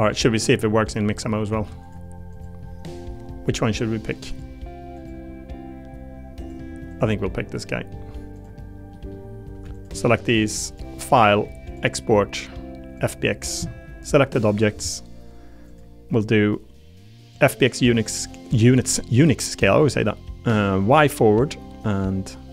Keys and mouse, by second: 0.1 middle click, 1.5 ctrl+Tab, 2.3 click, 4.0 click, 4.9 click, 6.4 click, 6.9 click, 7.1 middle click, 7.6 middle click, 8.3 click, 8.9 middle click, 10.7-13.1 drag.